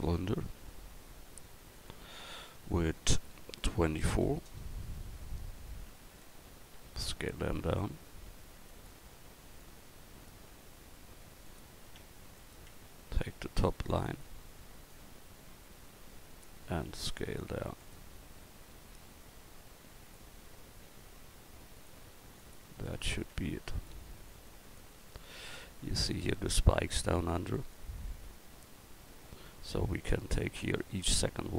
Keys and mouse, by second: 6.7 s, 9.6-12.4 drag, 10.9 s, 12.7 Tab, 13.1-14.5 right drag, 16.9 s, 20.9 s, 23.3 Tab, 28.2 Tab, 30.4-31.5 right drag.